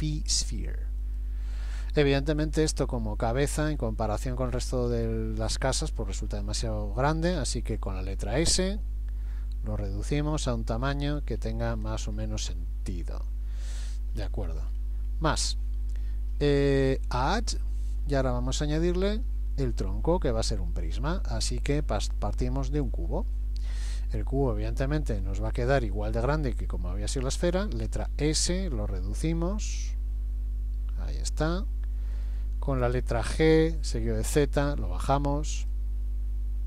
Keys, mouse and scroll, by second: 2.7-3.3 scroll down 3, 3.3 scroll up 1, 3.7-4.5 scroll down 1, 4.5 scroll down 1, 4.9 scroll down 1, 7.4 s, 11.8 scroll up 4, 12.1-12.8 scroll down 1, 12.9-14.1 scroll down 5, 14.2 scroll down 1, 17.5 click, 24.0-24.7 scroll down 7, 27.9 s, 33.3 g.